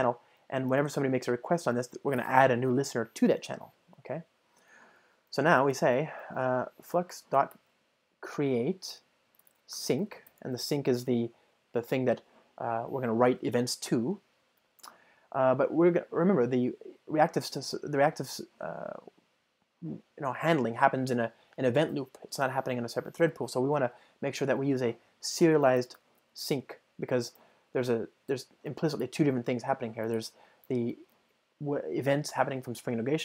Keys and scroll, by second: 9.0 Return, 28.4 Return, 31.2 Return.